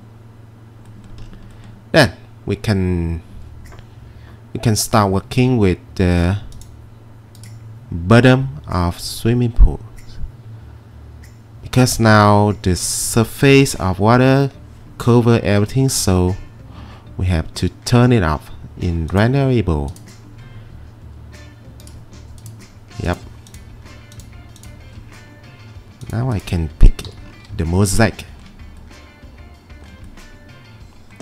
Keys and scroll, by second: 27.1 p.